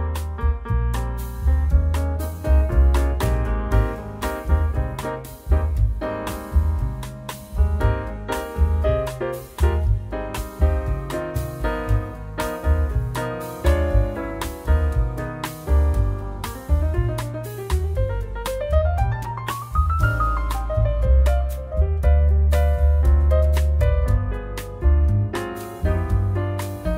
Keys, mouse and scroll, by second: 2.3 n, 2.7 right click, 3.4 click, 3.7 shift+a, 6.9-7.3 scroll up 5, 7.3-7.9 scroll down 1, 7.9 scroll down 1, 8.1 middle click, 8.7 click, 9.2 click, 9.5-9.8 scroll down 7, 10.0 click, 10.4 click, 10.9 click, 11.7 click, 12.2 shift+a, 14.8 click, 15.7 click, 16.4 click, 20.0-20.6 scroll up 4, 20.6-21.3 scroll down 3, 21.3 click, 23.1 scroll up 2, 23.3 middle click, 23.7-24.3 scroll up 3, 24.0 shift+middle click, 24.8 click, 25.1-25.8 scroll up 4, 25.4 click, 25.8-26.2 scroll down 10, 26.2 middle click, 26.8 shift+middle click.